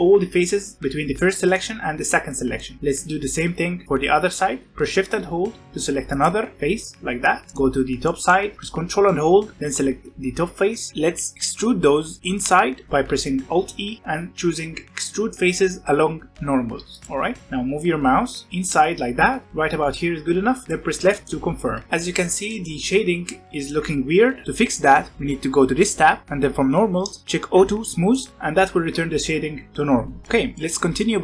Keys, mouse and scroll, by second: 6.0 shift+click, 7.3 scroll down 2, 7.5-9.5 middle drag, 9.5 ctrl+click, 10.9-11.9 middle drag, 13.9 alt+e, 21.1-22.2 middle drag, 22.2 scroll down 1, 22.4 middle click, 22.7 Tab, 23.2-25.0 middle drag, 25.8 click, 28.0 click, 30.2-31.2 middle drag.